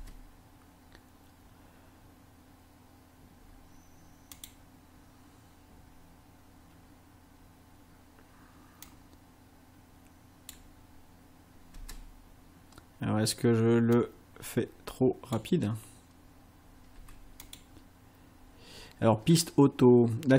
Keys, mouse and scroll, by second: 0.0 space, 4.4 click, 8.9-10.7 drag, 11.8 space, 14.0-15.6 drag, 17.0 space, 17.4 click.